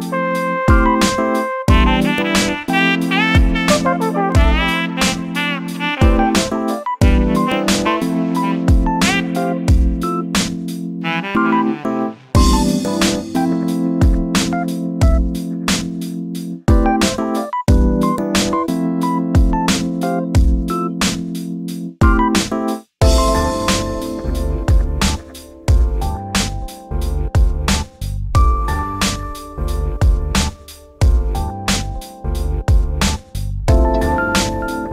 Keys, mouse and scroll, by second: 2.6 scroll down 4, 2.8 shift+middle click, 3.2 scroll up 1, 3.4 3, 3.5 click, 3.8-5.4 shift+middle drag, 5.9 shift+d, 11.8 g, 14.1-14.6 scroll up 10, 14.6 click, 15.0 click, 15.3 click, 15.5 scroll down 5, 15.7 shift+middle click, 16.3 ctrl+z, 17.0 click, 17.3 click, 18.2 click, 18.5 click, 19.7 click, 20.2 click, 20.4 x, 23.3 click, 23.8 shift+d, 26.7 1, 27.2 click, 27.7 click, 29.2 g, 31.2 3, 31.3 click, 32.0 shift+d.